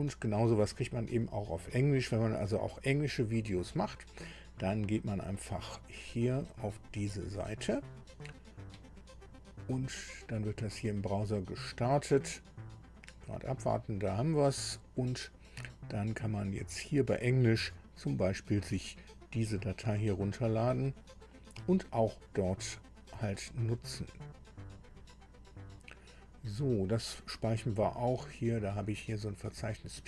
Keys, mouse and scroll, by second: 5.8 click, 16.5 scroll down 2, 24.2 click.